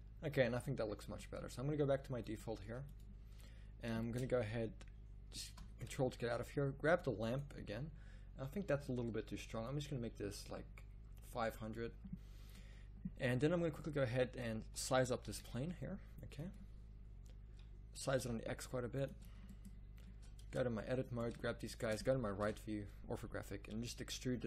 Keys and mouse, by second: 5.5 Escape, 6.2 z, 14.6 z, 15.2 s, 18.0 s, 20.4 Tab, 22.4 KP_3, 23.6 e.